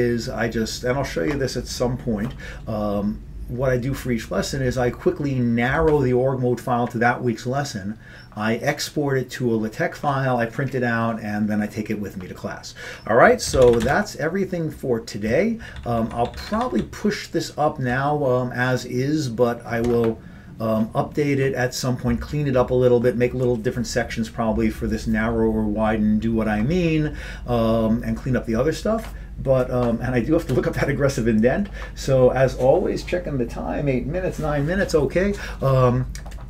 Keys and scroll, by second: 13.7 ctrl+x, 13.8 b, 14.0 Return, 15.7 ctrl+p, 15.8 ctrl+p, 16.0 ctrl+p, 16.1-20.4 ctrl+p.